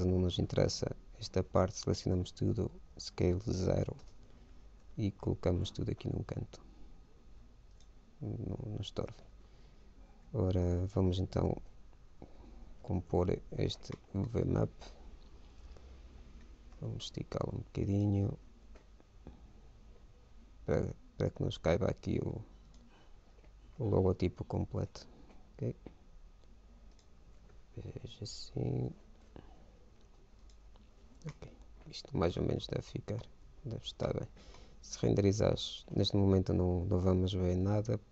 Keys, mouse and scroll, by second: 1.0 a, 1.8 a, 3.3 s, 5.1 g, 9.8 a, 11.4 l, 13.1 ctrl+i, 14.7 KP_1, 16.5 a, 17.0 s, 18.6 g, 24.0 s, 27.5 s, 31.5-33.8 middle drag, 33.8 Tab, 34.3-36.2 middle drag, 35.6 shift+z.